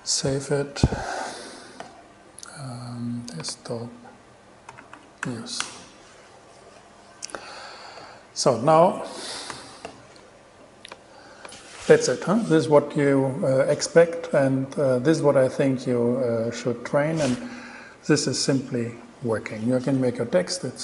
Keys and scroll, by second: 0.2 super+s, 4.7-5.9 typing, 9.7 super+n.